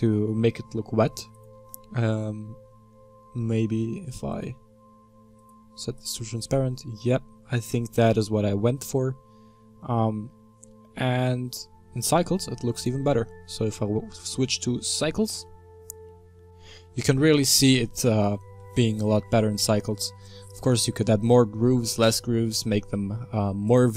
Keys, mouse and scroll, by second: 5.2 click, 6.2-9.3 middle drag, 10.8-15.1 middle drag, 15.1-16.5 drag.